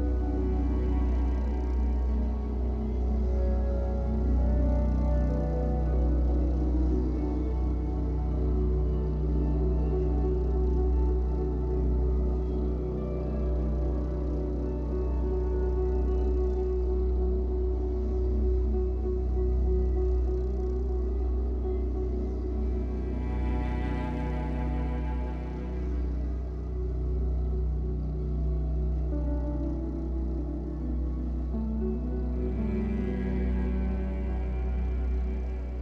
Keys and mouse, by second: 0.3 click, 1.2 KP_5, 1.4 KP_0, 1.5 KP_0, 2.0 Return, 3.3 click, 3.6 space, 7.0 space, 9.1 click, 9.9 KP_1, 10.1 KP_0, 10.2 KP_0, 10.4 Return, 11.5 click, 11.7 space, 13.5 space, 14.8 alt+click, 15.8 click, 16.6 KP_5, 16.6 space, 16.6 KP_0, 16.9 Return, 18.1-19.2 drag, 18.2 space, 18.4 space, 19.5 space, 20.8-26.1 alt+drag, 30.2 click, 30.9-31.8 alt+drag, 34.9 click.